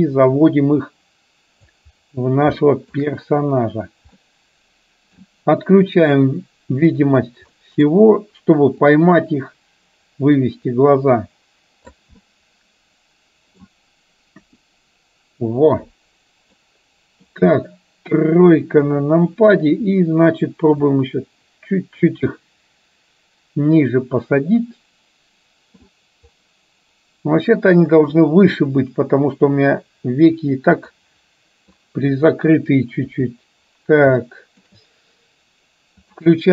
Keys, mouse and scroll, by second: 2.6-3.1 shift+middle drag, 4.2-5.4 middle drag, 7.6 middle click, 8.9-12.1 drag, 12.2-13.7 middle drag, 14.5 KP_1, 16.7 middle click, 18.9 KP_3, 20.9 click, 21.2-22.2 drag, 22.4-25.9 middle drag, 28.6-30.5 drag, 31.0 middle click, 33.1 KP_3, 34.4 shift+middle click, 36.2 click.